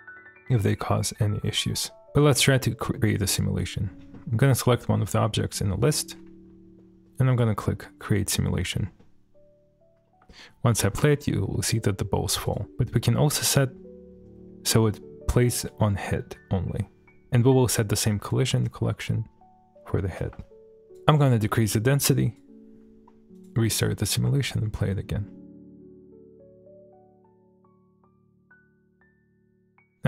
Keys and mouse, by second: 1.2-2.0 middle drag, 3.3 click, 4.1 shift+middle drag, 4.8-5.7 middle drag, 7.3 click, 8.5-9.0 middle drag, 10.1 space, 11.0 shift+space, 11.2 shift+middle drag, 11.5-12.2 middle drag, 12.4 click, 15.6 click, 17.1-18.5 drag, 18.9 shift+middle click, 19.4-19.7 shift+middle drag, 20.8 click, 21.7 click, 23.3 click, 23.8 middle click, 24.3 space, 25.3-25.6 middle drag, 29.5 space.